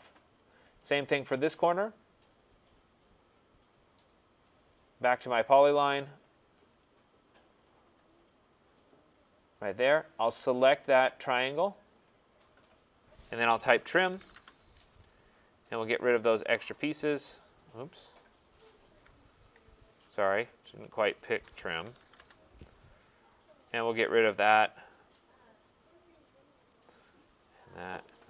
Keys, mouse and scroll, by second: 0.2-1.0 scroll, 2.5 click, 4.5 click, 5.9 click, 6.8 click, 8.3 click, 9.2 click, 11.0 click, 12.0 click, 13.7-14.7 typing, 15.8 click, 19.4 Escape, 19.4 typing, 20.0 click, 20.9 click, 21.5-22.5 typing, 23.6 click, 25.0 click, 26.7 click, 27.7 click.